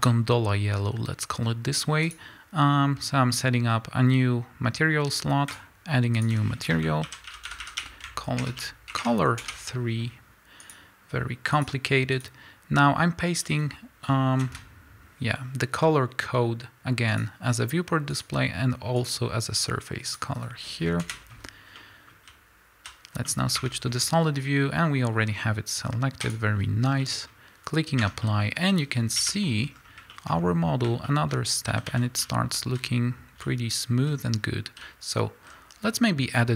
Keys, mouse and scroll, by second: 0.0 z, 2.1-14.4 drag, 9.5 Return, 21.8-22.8 middle drag, 22.8 z, 23.1 middle click, 23.1 scroll down 1, 23.5-26.3 middle drag, 23.6 Tab, 23.8-26.3 scroll up 2, 26.3 drag, 26.9 scroll down 2, 27.0-32.8 middle drag, 28.0 Tab, 29.2 KP_1, 29.8-30.1 scroll down 2, 30.3-31.1 scroll up 2, 31.3-31.9 scroll up 2, 31.9 a, 32.8 z.